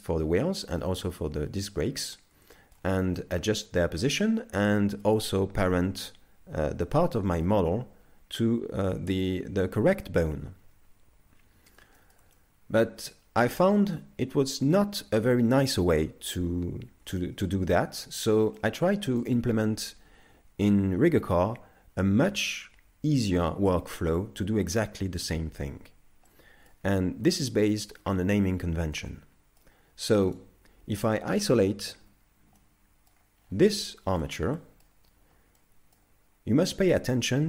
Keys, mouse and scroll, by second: 0.1-0.4 scroll down 3, 0.7 shift+middle click, 1.0 middle click, 2.6 shift+middle click, 3.2 middle click, 6.6 z, 7.2 shift+middle click, 7.9 z, 11.3 z, 12.0 shift+middle click, 12.4 middle click, 13.9 middle click, 17.8 shift+middle click, 18.6 middle click, 26.3 middle click, 29.0 middle click, 30.4 right click, 32.0 KP_Divide, 32.6 middle click, 33.4 scroll up 4, 34.0 shift+middle click, 34.6 middle click, 35.6 middle click, 35.8 shift+middle click.